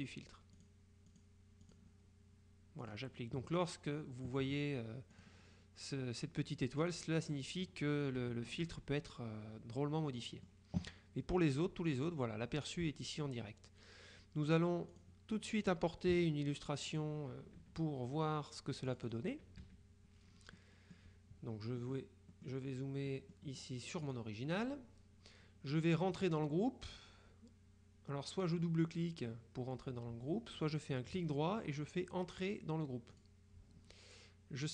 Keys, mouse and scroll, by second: 0.6 click, 2.9 click, 5.3 click, 6.9 click, 8.3 KP_Subtract, 9.9-11.1 drag, 15.0 click, 16.2 KP_Subtract, 17.0 click, 17.5 KP_Subtract, 19.0 click, 19.7 KP_Subtract, 20.7 middle click, 21.9 middle click, 23.2 middle click, 24.1 click, 33.2 click.